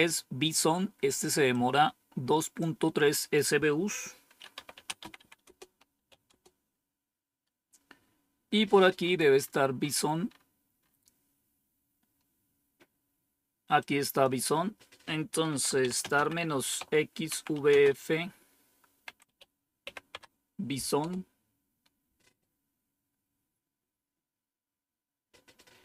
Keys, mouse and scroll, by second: 1.4-2.7 drag, 3.1 click, 4.2-6.5 typing, 8.9-11.5 scroll up 1, 11.5-13.7 scroll up 1, 13.7 click, 14.4 click, 15.1-19.7 typing, 20.0 Tab, 20.9 Return.